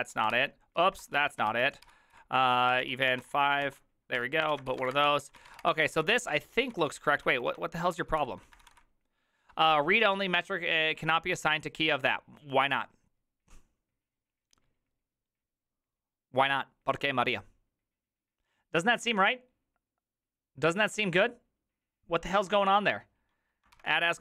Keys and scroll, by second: 0.0-9.2 typing, 3.7 ctrl+y, 23.9 ctrl+c, 23.9-24.2 typing.